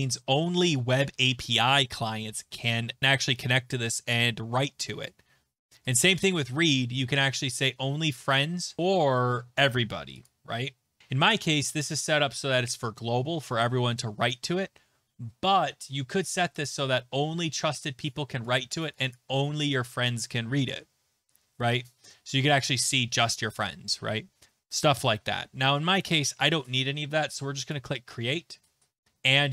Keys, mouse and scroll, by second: 5.9 click, 6.2 click, 10.3 click, 16.6 click, 18.5 click, 19.1 click, 21.9 click, 24.9 click.